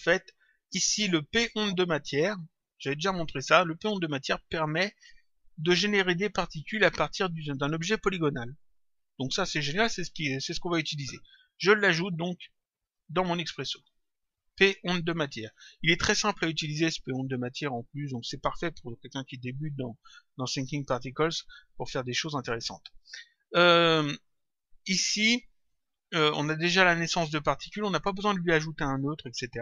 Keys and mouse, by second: 1.3 click, 11.8 click, 13.7 click.